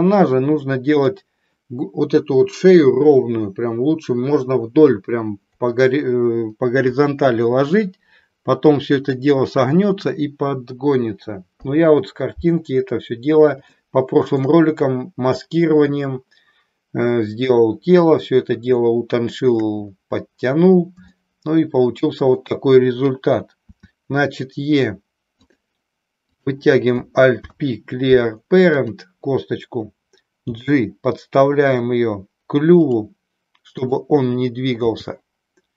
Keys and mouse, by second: 1.0 click, 13.7 shift+middle click, 18.7-19.7 shift+middle drag, 21.1-22.5 shift+middle drag, 25.5 click, 26.2 click, 27.4 alt+p, 30.4 g, 33.9 click, 34.9 g.